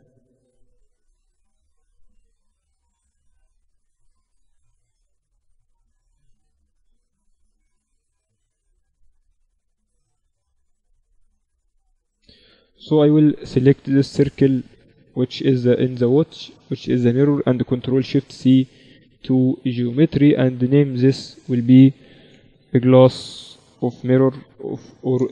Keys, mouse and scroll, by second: 1.2-2.5 right drag, 13.3 z, 13.9 z, 14.6 right click, 15.6-17.2 right drag, 16.0 z, 17.4 middle click, 17.6 ctrl+alt+shift+c, 20.2-22.8 drag, 24.8 s.